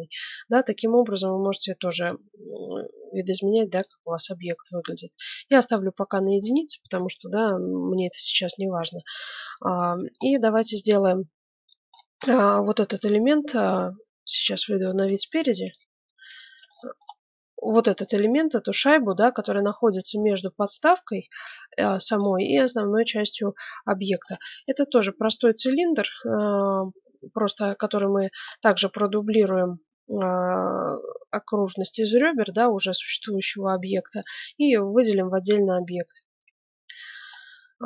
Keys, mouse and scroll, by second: 0.9-2.5 middle drag, 3.8-5.4 drag, 6.9 KP_Divide, 8.0 KP_Divide, 9.5 middle click, 10.4-14.3 middle drag, 14.3 KP_1, 14.8-17.1 middle drag, 17.9-18.9 middle drag, 22.2-24.2 middle drag, 24.2 click, 24.4-26.6 middle drag, 26.9-30.4 middle drag, 33.6-37.8 middle drag.